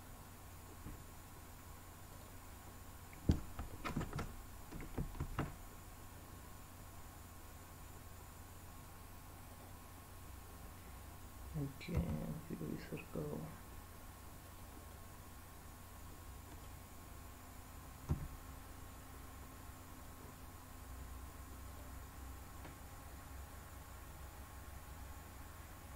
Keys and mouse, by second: 3.9 ctrl+z, 5.2 shift+a, 11.9 s, 14.4 click, 14.9-16.6 middle drag, 18.0 s, 21.7 click, 23.5-25.9 drag.